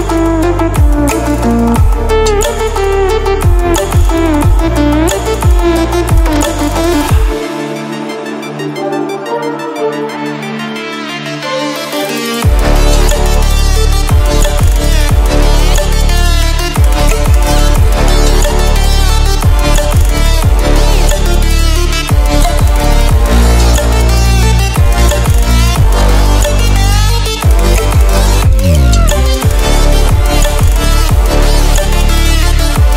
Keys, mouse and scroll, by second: 0.4 click, 4.4-7.7 drag, 11.3 click, 12.8 ctrl+w, 15.7 ctrl+w, 16.5 click, 17.0-18.1 scroll up 1, 18.1 click, 20.3 ctrl+w, 24.2-26.1 drag, 30.7-31.9 drag.